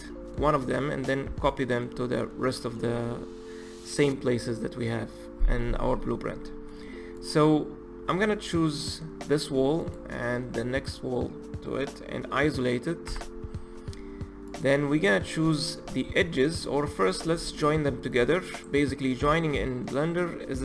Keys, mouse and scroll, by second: 0.0-5.5 middle drag, 6.1-7.2 middle drag, 7.2 click, 8.0-8.5 scroll down 2, 8.5-9.8 scroll up 1, 9.8 shift+click, 11.0-13.1 middle drag, 13.1 KP_Divide, 14.5 click, 14.9-16.0 middle drag, 16.0-16.4 scroll up 2, 16.4-16.8 middle drag, 16.8-17.1 scroll down 1, 17.1 click, 18.1 click, 19.4-20.6 middle drag.